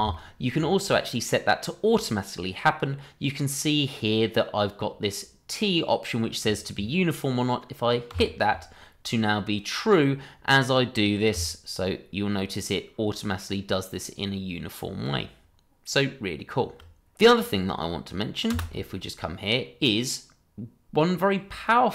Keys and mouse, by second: 0.2-0.5 shift+middle drag, 8.1 t, 18.5 space, 18.9 middle drag, 19.5-21.1 middle drag.